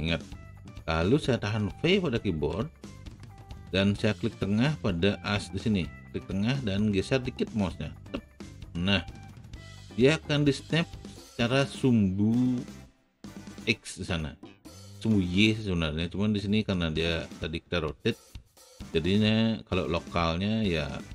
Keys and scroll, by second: 2.6 v.